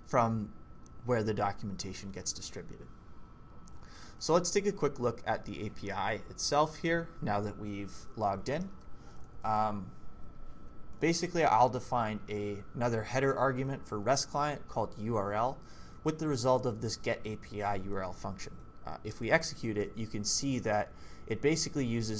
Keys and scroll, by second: 3.0-3.9 typing, 8.1-9.2 typing, 11.1 j, 11.3 j, 15.8-17.4 typing, 19.1 ctrl+c.